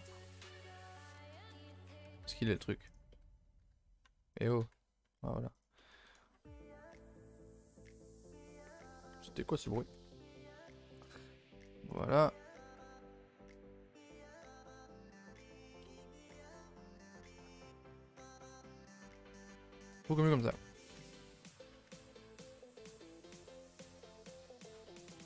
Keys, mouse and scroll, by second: 0.4 click, 0.7 g, 1.5 z, 1.7 click, 2.3 click, 2.9 z, 3.1 middle click, 3.6 g, 4.4 click, 4.6 g, 5.7 middle click, 6.4 g, 9.4 a, 9.5 a, 11.4 click, 11.5 g, 12.5 click, 12.6 g, 14.3 click, 14.3 g, 16.6 middle click, 17.0 ctrl+s, 19.4 middle click, 19.6-19.9 scroll down 4, 19.9 shift+middle click, 20.8 Tab, 21.1-21.5 middle drag, 21.5 a, 21.6 a, 22.1-25.2 middle drag.